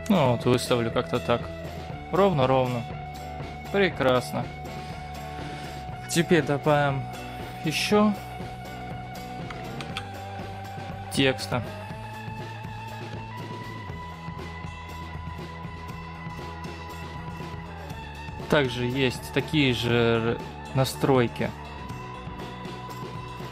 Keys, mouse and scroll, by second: 0.4-2.8 scroll up 13, 2.8-3.8 scroll down 5, 3.8-4.3 scroll down 5, 4.3-4.9 scroll up 1, 4.9-5.2 scroll up 1, 5.2-5.8 scroll down 1, 5.8-7.2 scroll up 1, 7.3-8.2 scroll down 1, 8.6-9.3 scroll down 2, 9.9 shift+a, 12.6 middle click, 13.3 scroll down 3, 13.6 scroll up 3, 14.0 Tab, 14.5-17.2 typing, 17.0 Return, 17.8 middle click, 20.6-23.0 scroll down 2, 23.0-23.5 scroll down 4.